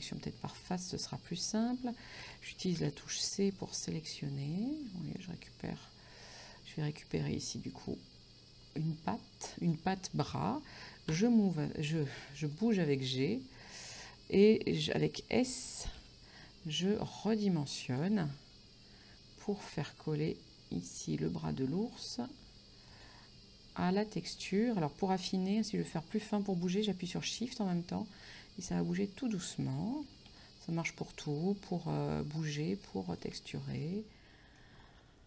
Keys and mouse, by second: 0.1 click, 2.8 c, 3.8 click, 6.5 click, 9.9 right click, 11.2 g, 12.5 click, 13.3 middle click, 16.0 s, 17.9 click, 18.2 g, 23.0 click, 24.1 s, 29.3 shift+click, 30.1 g, 33.2 shift+click, 33.9 middle click.